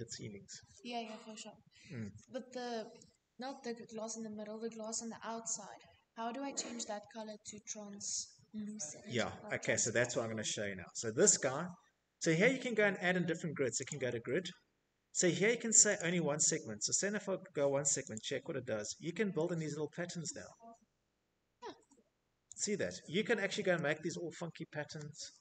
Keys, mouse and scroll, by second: 0.2 middle click, 0.3 middle click, 0.3 middle click, 5.0 middle click, 5.1 middle click, 5.3 scroll, 5.4 middle click, 5.7 middle click, 5.8 middle click, 5.9 middle click, 6.4 middle click, 6.5 middle click, 7.0 middle click, 7.3 middle click, 8.0 middle click, 8.1 middle click, 9.7 shift+middle click, 9.8 middle click, 9.9 middle click, 10.0 middle click, 11.3 click, 13.4 click, 15.6 click, 20.0 click, 20.8 Escape, 21.0 Escape, 22.9 middle click, 22.9-23.3 scroll, 24.1 Tab.